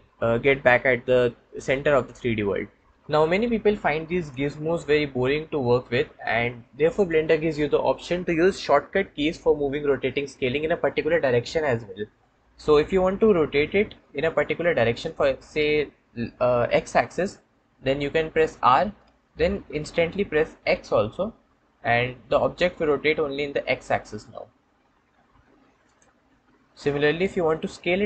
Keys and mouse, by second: 4.2 click, 6.8 click, 18.4 r, 20.6 x, 25.7-26.2 drag.